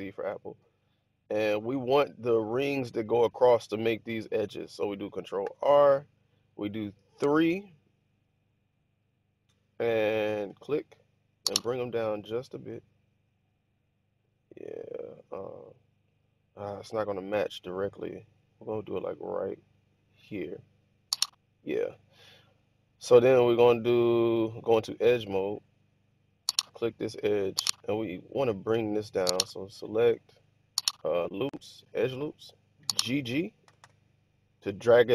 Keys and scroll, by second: 5.3 ctrl+r, 7.1 3, 33.6 g, 33.7 g.